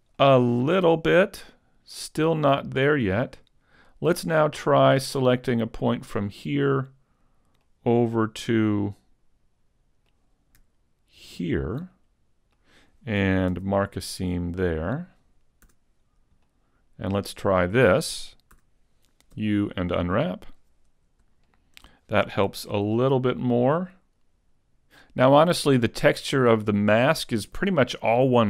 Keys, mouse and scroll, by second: 0.2 middle click, 3.4 scroll up 1, 6.1 right click, 6.6 middle click, 8.1 middle click, 11.4 ctrl+right click, 11.8 middle click, 13.5 ctrl+e, 15.7 a, 16.1-16.5 scroll down 2, 16.4 middle click, 18.6 a, 19.4 u, 21.9 shift+middle click, 21.9 scroll down 2, 22.5 a, 22.8 scroll up 2, 23.4 middle click.